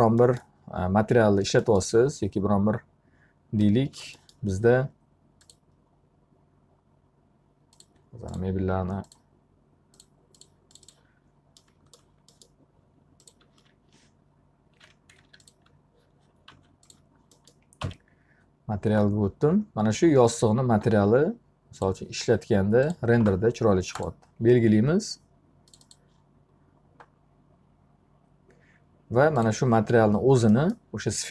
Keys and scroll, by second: 13.3 alt+q, 16.6 alt+a, 17.9 m.